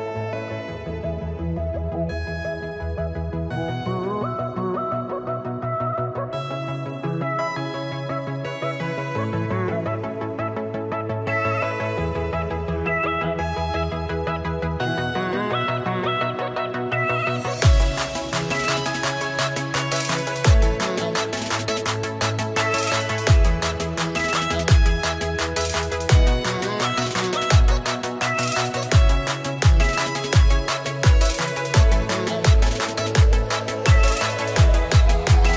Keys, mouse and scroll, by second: 1.7 KP_3, 2.6 KP_3, 2.7 scroll up 1, 3.6 scroll up 1, 4.0 shift+middle click, 5.0 click, 6.1 click, 12.1 click, 12.6 scroll down 3, 16.4 click, 17.9 click, 21.9 click, 24.3 click, 28.8 shift+middle click, 31.0 shift+middle click, 31.0 KP_0, 33.4 KP_0, 33.4 middle click, 34.5 middle click, 34.5-35.2 scroll up 3.